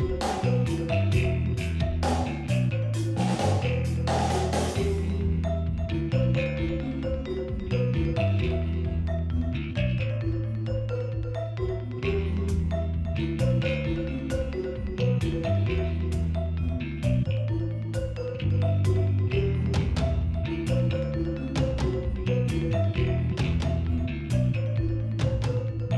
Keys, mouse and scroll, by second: 1.2 Delete, 1.3 click, 1.9 alt+click, 2.6 Delete, 2.8 click, 3.3 space, 3.7 click, 4.7 Right, 4.8 Down, 4.9 Up, 4.9 Right, 5.0 click, 5.2 p, 5.3 click, 5.9 alt+scroll up 1, 6.0 click, 6.1 ctrl+z, 6.2 click, 6.9 alt+scroll down 1, 7.0 click, 7.4 click, 7.5 alt+click, 8.2 Delete, 8.6 alt+click, 8.9 click, 9.1 click, 9.3 scroll down 2, 9.7 alt+scroll up 1, 9.8 space, 9.8 alt+scroll down 1, 9.8-12.6 drag, 13.8 alt+scroll up 1, 15.0 scroll up 2, 15.1 alt+scroll down 1, 16.4-18.4 drag, 25.3 alt+scroll down 1.